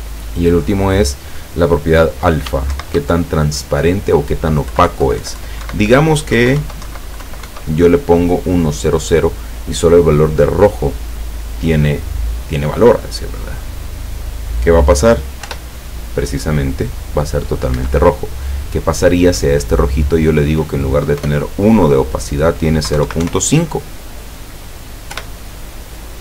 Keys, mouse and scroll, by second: 0.6 click, 2.8 shift+Right, 4.7 Left, 6.4 Delete, 6.6 KP_0, 6.9 Right, 7.3 Delete, 7.5 KP_0, 15.5 p, 17.9 Escape, 19.7 click, 21.2 BackSpace, 23.0 KP_0, 23.1 KP_Decimal, 23.2 KP_5, 25.2 p.